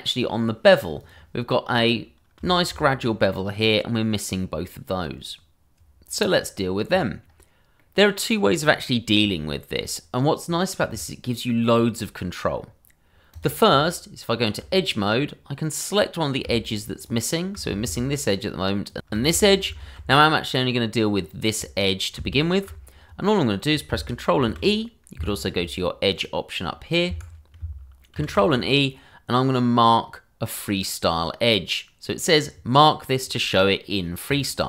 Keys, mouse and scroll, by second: 1.0 click, 1.6-2.4 scroll up 1, 2.5 middle click, 2.6 shift+middle click, 2.8 scroll up 1, 3.0 middle click, 4.2-4.6 scroll down 1, 4.6 middle click, 7.2-7.8 scroll up 1, 7.8 middle click, 12.3 scroll down 1, 13.3 click, 13.7 Tab, 15.1 scroll up 2, 16.1 click, 17.0 click, 18.8 alt+shift+click, 19.6 ctrl+z, 21.2 click, 22.3 alt+click, 24.4 ctrl+e, 25.1 Escape, 26.1 click, 27.1 Escape, 28.1 ctrl+e, 34.2 click.